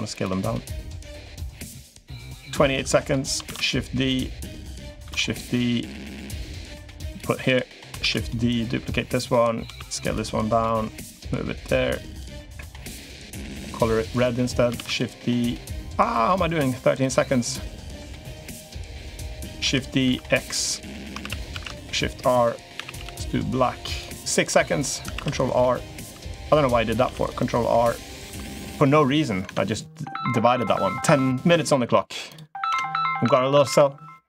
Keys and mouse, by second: 0.5-1.9 drag, 2.5 click, 3.3 shift+d, 3.9 click, 4.8 shift+d, 5.3 click, 6.8 click, 7.1 l, 7.8 shift+d, 8.4 click, 9.4 s, 10.5 click, 12.0 click, 13.3 g, 14.6 shift+d, 16.0 click, 17.3 click, 18.6 click, 19.4 shift+d, 21.0 shift+r, 21.3 shift+r, 22.5 a, 22.8 g, 24.6 click, 24.9 ctrl+r, 25.9 3, 26.2 click, 26.8 ctrl+r, 28.0 2, 29.2 Tab, 32.5 Tab, 33.0 Tab, 33.5 a.